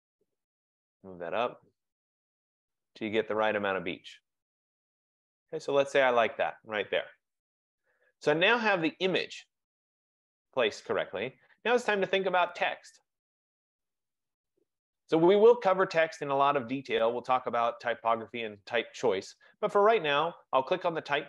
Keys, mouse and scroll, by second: 0.1 click, 2.3 click.